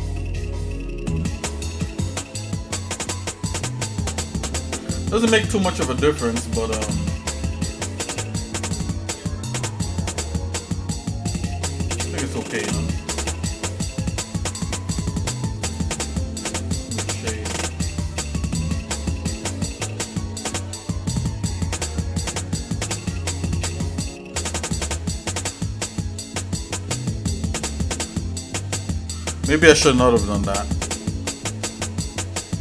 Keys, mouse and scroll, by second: 0.0 click, 1.7 Tab, 2.9 shift+middle click, 4.9-5.3 scroll down 1, 5.3 shift+middle click, 6.6 middle click, 7.3 shift+middle click, 8.2-9.5 shift+middle drag, 10.8 shift+middle click, 12.0 click, 14.9 right click, 18.2 click, 20.4 shift+middle click, 21.7 scroll down 1, 22.3 shift+middle click, 23.0 middle click, 23.8 shift+middle click, 24.8 shift+middle click, 26.0-28.5 shift+middle drag, 28.9 shift+middle click, 30.5 shift+middle click, 31.8 shift+middle click, 32.3 middle click.